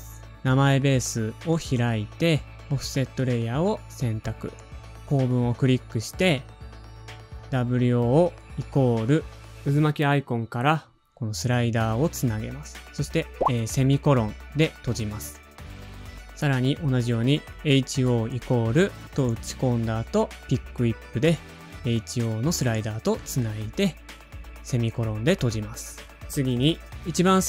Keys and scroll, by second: 0.8-1.5 typing.